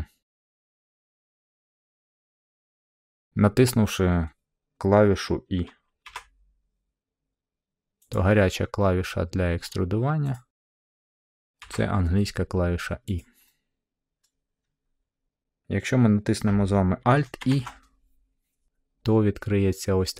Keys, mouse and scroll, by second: 0.6 shift+middle click, 2.7 middle click, 3.2 middle click, 6.0 e, 8.1 click, 8.4 scroll, 9.6-10.3 scroll, 10.3 click, 11.6 e, 13.1-14.2 drag, 14.2-15.3 middle drag, 17.4 alt+e.